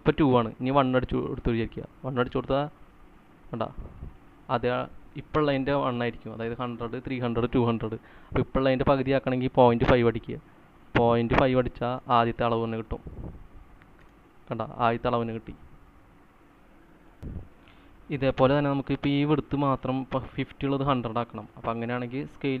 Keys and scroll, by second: 1.1 1, 1.9 Return, 11.9-12.8 typing, 14.4 space, 15.7-16.4 typing, 17.5 typing.